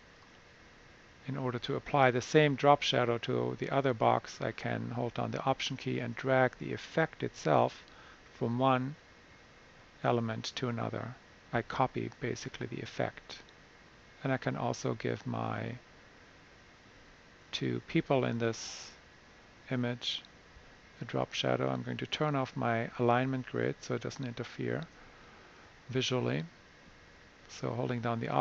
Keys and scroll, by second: 25.4 super+'.